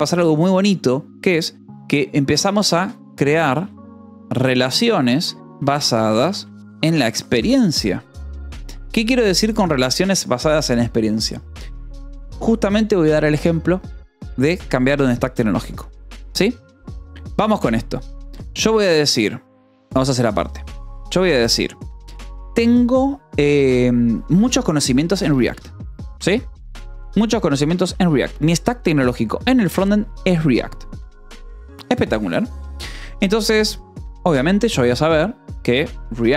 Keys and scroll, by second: 0.0-0.1 typing, 2.5-9.1 typing, 17.7 o, 18.1 space, 19.6 BackSpace, 20.0 Return, 21.0 space, 22.0 BackSpace, 22.3 space, 24.9-28.3 typing, 26.1 Escape, 27.0 Escape, 33.7 shift+;, 33.9 space.